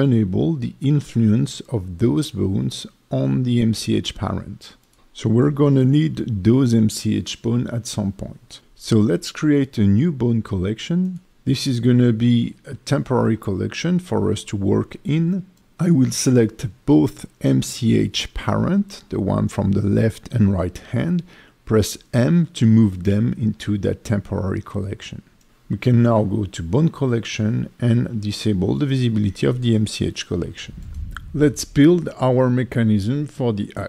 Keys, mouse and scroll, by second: 5.1 click, 5.1 scroll down 2, 10.9 click, 13.5 click, 13.6 click, 16.7-17.4 scroll up 1, 17.5 click, 18.8 click, 21.1 shift+click, 23.8 m, 25.3 click, 26.1 click, 28.3 click, 29.8 click, 31.8 click, 32.8 ctrl+Tab, 33.5 click.